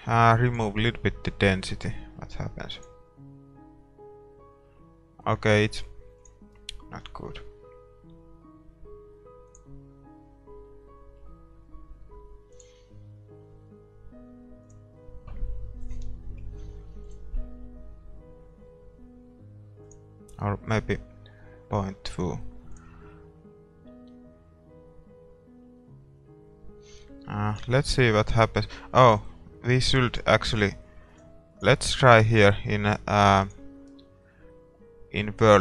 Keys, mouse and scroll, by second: 0.6-2.3 drag, 0.6 middle click, 2.9-4.5 drag, 5.8-8.0 drag, 9.5-11.3 drag, 10.1 middle click, 10.9-13.0 middle drag, 12.8-14.5 drag, 14.8-16.6 drag, 16.9 click, 17.1-21.7 drag, 23.0-24.6 drag, 30.5-35.6 drag, 30.5-33.5 middle drag.